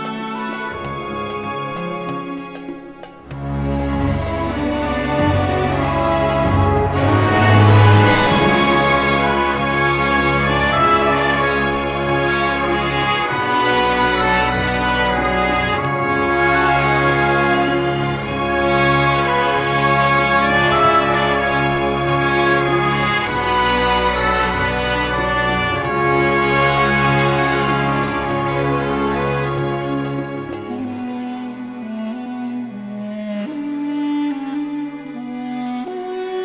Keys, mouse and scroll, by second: 1.4 click, 2.8 click, 5.4 click, 7.6 click, 8.9 click, 10.6 click, 11.4 click, 14.4 click, 15.7 click, 17.4 click, 19.2 click, 20.7 click, 22.2 click, 23.3 click, 24.3 click, 25.6 click, 26.0 click, 27.8 click, 28.7-30.6 scroll up 4, 31.5 click, 32.8 click, 33.6 click, 34.7 click, 35.4 click.